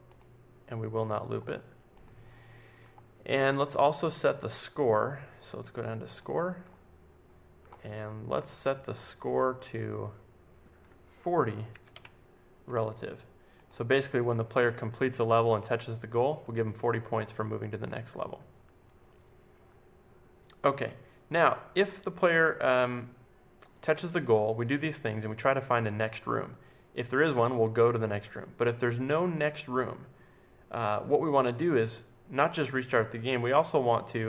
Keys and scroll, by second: 11.7 typing.